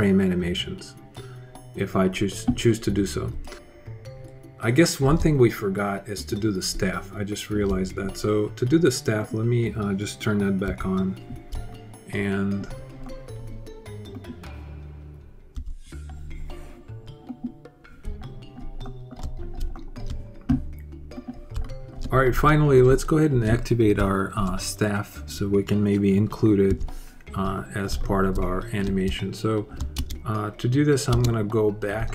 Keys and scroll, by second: 10.4 h, 11.3 alt+h, 15.3 h, 26.4 h, 27.2 alt+h, 29.7 alt+space, 30.6 space, 30.9 space, 31.7 alt+space.